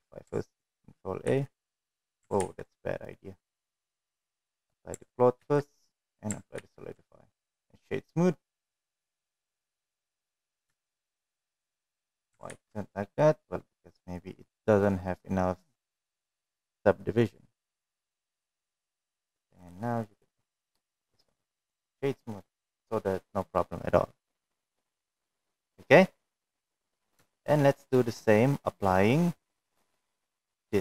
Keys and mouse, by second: 1.1 ctrl+a, 2.3 ctrl+z, 4.4 click, 5.3 ctrl+a, 6.4 ctrl+a, 7.6-8.8 right drag, 9.5-10.1 middle drag, 10.7 shift+middle drag, 11.3-11.8 middle drag, 12.4 ctrl+z, 14.6-16.8 drag, 19.5 right click, 21.2 right click, 22.3 click, 22.6-23.3 middle drag, 24.9-25.9 middle drag, 26.6-26.9 middle drag, 27.2 shift+middle drag, 27.5-28.3 middle drag, 30.4 click.